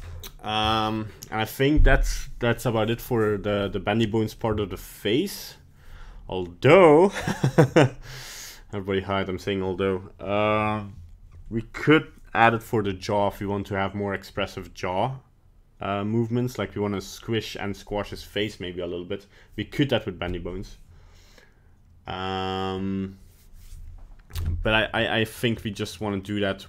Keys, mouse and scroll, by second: 0.1 middle click, 0.6 middle click, 0.7 middle click, 0.9 middle click, 24.7 scroll down 2, 25.0 middle click, 25.5-25.9 scroll up 3, 25.9 right click, 26.2 middle click, 26.6 middle click.